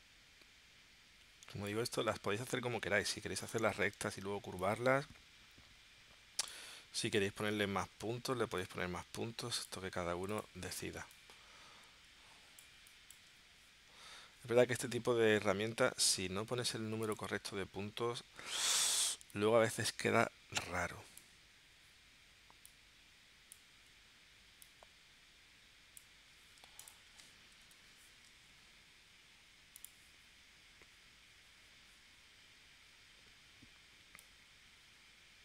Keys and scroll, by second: 11.0 space, 15.9 a, 27.6 p.